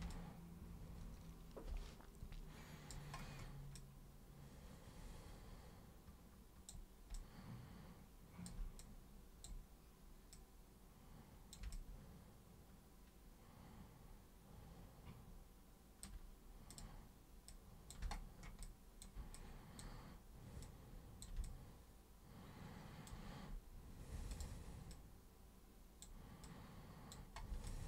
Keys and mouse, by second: 0.1-2.9 alt+super+drag, 3.8-6.7 alt+super+drag, 7.1-8.4 alt+super+drag, 8.8-9.4 super+drag, 10.3-11.5 super+drag, 11.7-16.0 alt+super+drag, 16.7 super+click, 17.5 super+click, 18.6 alt+super+click, 19.3-19.8 super+drag, 20.6 super+click, 21.4-23.1 alt+super+drag, 24.3 super+click, 24.9 super+click, 26.4 super+click, 27.7 alt+super+click.